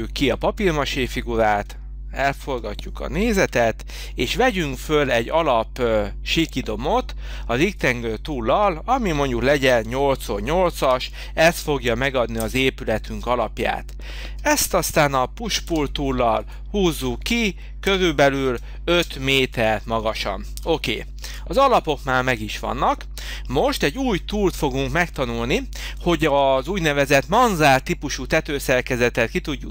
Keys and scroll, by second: 3.4 h, 9.8 8, 11.0 8, 12.4 Return, 15.7 p, 17.9 5, 19.0 Return, 20.6 h.